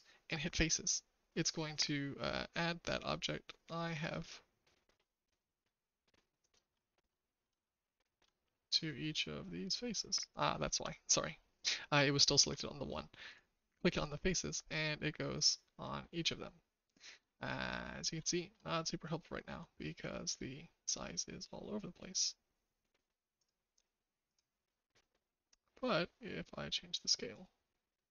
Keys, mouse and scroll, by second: 0.4 click, 4.0 click, 6.4 click, 7.6 shift+middle click, 13.2 click, 14.2-17.1 shift+middle drag, 18.3 shift+middle click, 20.2 click, 23.3 click, 27.4-28.1 drag.